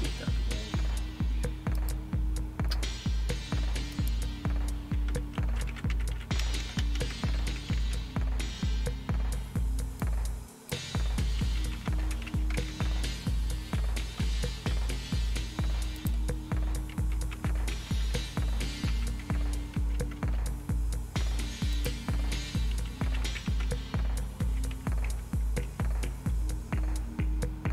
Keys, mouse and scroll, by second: 1.8 click, 2.2 click, 3.9 click, 5.1-8.3 typing, 10.0-11.2 drag, 11.2-14.7 typing, 16.0 click, 16.7-20.4 typing, 21.7 click, 22.5-25.6 typing.